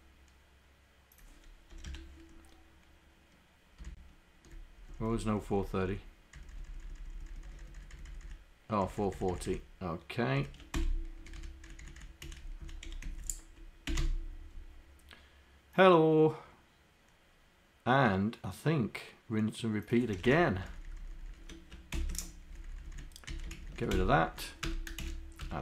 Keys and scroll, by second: 2.0 Home, 4.0 shift+Down, 5.3 shift+Down, 5.6 shift+Down, 6.7 shift+Down, 7.0 shift+Down, 7.4 shift+Down, 7.8 shift+Down, 8.3 shift+Down, 8.9 shift+Down, 9.3 shift+Down, 10.4 shift+Up, 12.5 Up, 12.9 End, 13.1 Left, 13.2 Left, 13.9 Delete, 14.0 4, 20.3 Home, 20.7 shift+Down, 22.8 Down, 23.3 Up, 23.6 shift+Down, 24.0 Delete, 24.3 Down, 24.7 Return, 25.5 Return.